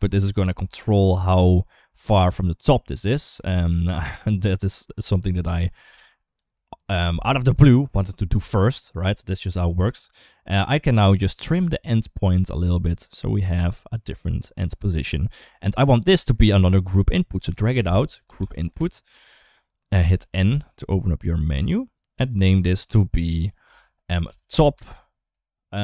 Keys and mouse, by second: 2.8-3.1 shift+middle drag, 3.4-3.8 shift+middle drag, 5.7 click, 6.5 shift+click, 6.9 g, 9.8-14.2 drag, 15.0 shift+middle click, 16.0-19.4 drag, 20.0 n, 20.3 n, 21.5 click, 22.5 click, 22.7-25.8 drag.